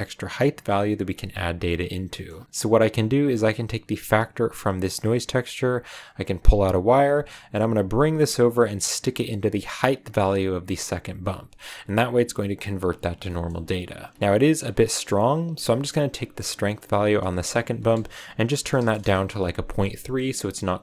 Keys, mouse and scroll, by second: 1.8 scroll down 2, 2.1 middle click, 4.3 click, 5.7-6.0 drag, 11.4 click, 12.3 click, 13.2 middle click, 13.4-13.8 scroll up 4, 17.2-20.2 drag, 20.5 scroll down 4.